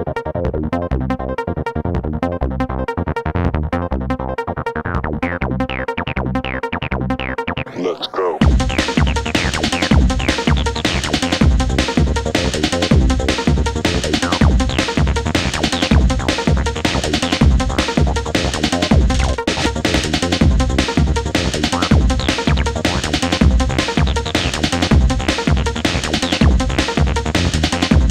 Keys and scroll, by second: 2.6 3, 7.1 ctrl+z, 7.8 4, 9.2 3, 18.3 ].